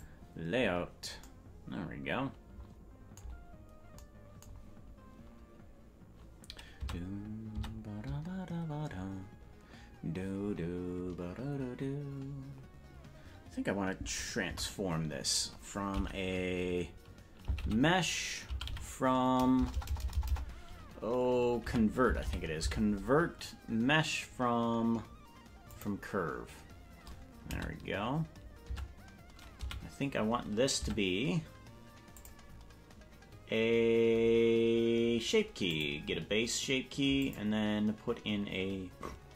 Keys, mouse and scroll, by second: 3.5 scroll down 3, 3.6-4.0 scroll up 1, 6.8 Tab, 7.8 Tab, 19.9 BackSpace, 29.4 Tab, 30.8 Tab, 30.8 a, 32.1 click, 35.7 click, 37.2 click.